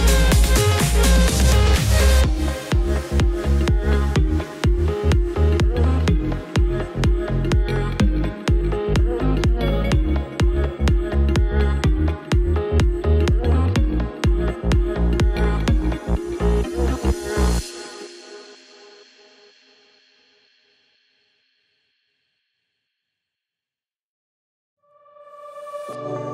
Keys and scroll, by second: 0.0 z.